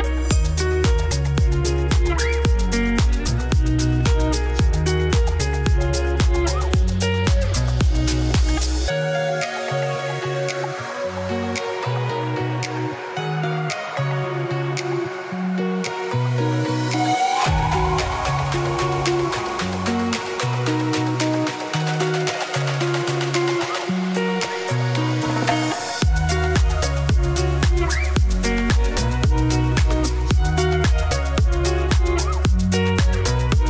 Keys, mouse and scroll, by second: 0.1 m, 0.6 click, 1.3 click, 1.7 m, 2.4 alt+click, 2.7 click, 3.0 g, 3.5 click, 3.8 click, 3.9 g, 4.5 KP_1, 4.9-5.2 scroll down 1, 5.2 click, 6.4 s, 7.4 middle click, 7.7 2, 7.8 click, 8.2 middle click, 8.6 click, 8.9-9.3 f, 9.8 middle click, 10.1 scroll down 2, 10.3 Tab, 10.5-12.2 shift+middle drag, 12.6 click, 12.8 z, 13.2 shift+middle click, 14.0 Tab, 14.3 middle click, 15.0 3, 15.6 click, 15.9 3, 16.1 click, 16.4 ctrl+click, 16.6 shift+middle click, 16.7 scroll up 2, 16.9 shift+middle click, 17.6 i, 19.1 shift+middle click, 19.4 g, 20.5 middle click, 21.3 ctrl+click, 21.5 middle click, 21.7 i, 23.3 Tab, 23.4 middle click, 23.5 scroll down 2, 23.6-24.7 middle drag, 24.7 click, 25.1-26.7 shift+middle drag, 27.3 middle click, 27.7 Tab, 27.9 3, 28.3 click, 28.7 ctrl+shift+click, 29.0-30.2 middle drag, 30.2 click, 30.3 g, 32.3 shift+click, 32.6 ctrl+click, 33.0 middle click, 33.2-33.5 scroll down 1, 33.5 shift+click.